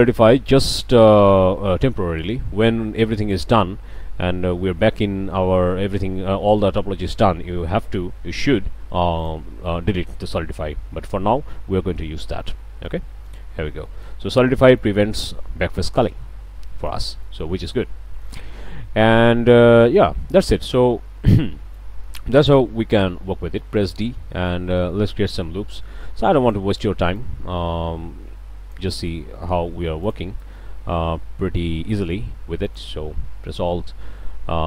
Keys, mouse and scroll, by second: 0.8 click, 2.3-2.7 drag, 2.7 middle click, 2.9 click, 3.5 Tab, 5.5 scroll down 2, 9.2 click, 10.0-10.4 drag, 10.9 ctrl+z, 12.4-13.1 drag, 13.1-13.6 middle drag, 13.3 Tab, 13.9-15.0 shift+drag, 16.0-17.1 drag, 17.2 shift+click, 17.5 shift+middle click, 18.1 shift+middle click, 18.7 shift+middle click, 20.1 scroll down 1, 21.1 shift+scroll up 2, 23.8 d, 24.5-26.7 drag, 27.1-28.9 drag, 29.0-29.3 drag, 29.3 q, 30.0 click, 30.6-31.3 middle drag, 31.3 click, 31.8 scroll up 2, 32.7 alt+click.